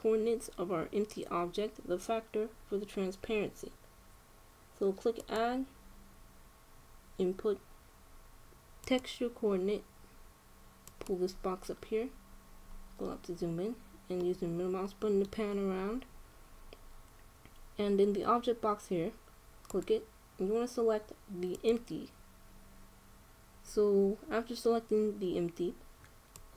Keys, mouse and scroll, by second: 5.9-7.8 drag, 12.8-16.7 middle drag, 20.4-22.1 drag.